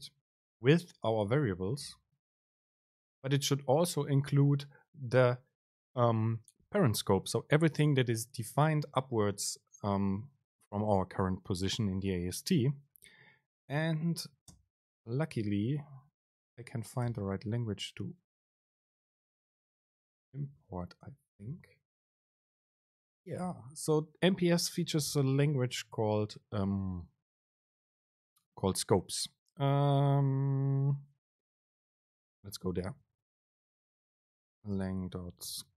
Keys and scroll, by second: 15.1 super+space, 17.4 super+l, 22.6 super+space, 25.5 super+l, 27.6 BackSpace, 33.3 ctrl+alt+shift+super+o.